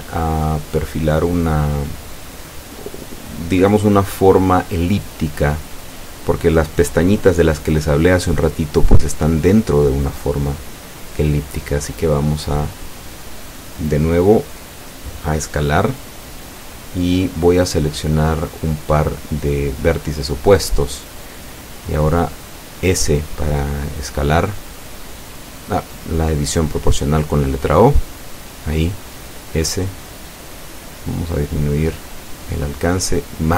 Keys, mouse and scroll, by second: 1.5 click, 17.8 e, 18.6 s, 22.8 click, 26.7 right click, 27.8 shift+right click, 32.8 s.